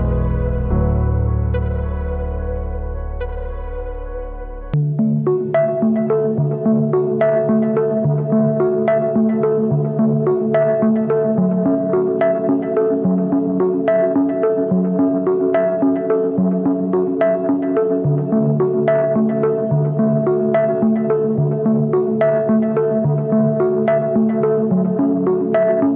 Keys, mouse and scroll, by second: 20.1 double click.